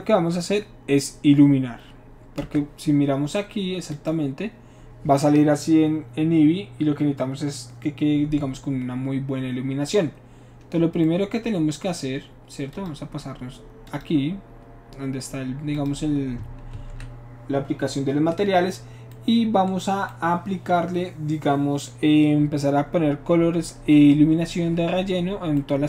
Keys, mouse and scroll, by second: 2.4 space, 3.9 click, 11.0-11.8 middle drag, 12.8 click, 13.9 click, 14.5-15.5 middle drag, 15.8 click, 16.7 ctrl+s, 24.4 middle click.